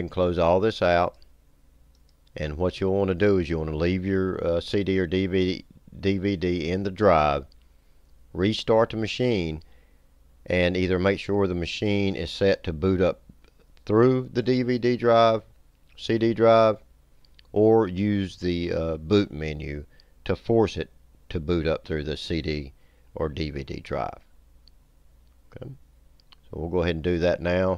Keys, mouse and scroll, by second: 0.3 click, 2.0 click.